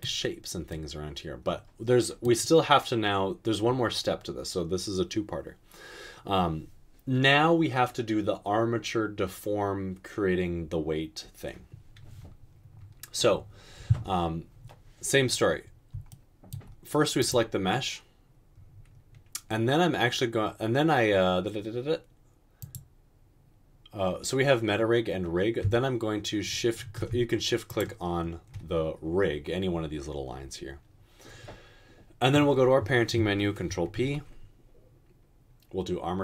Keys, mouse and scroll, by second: 34.0 ctrl+p.